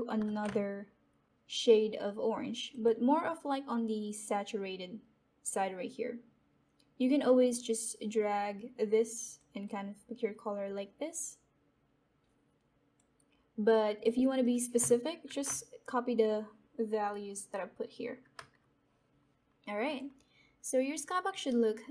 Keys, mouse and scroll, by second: 0.2 ctrl+v, 2.6 click, 7.4-14.0 drag, 15.2 ctrl+v, 19.8 click, 21.2 click.